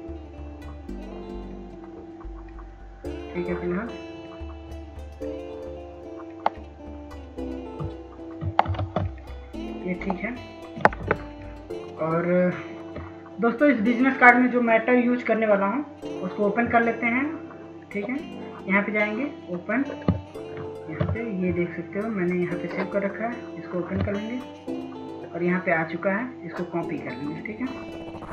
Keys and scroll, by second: 10.1 ctrl+space, 25.4 m.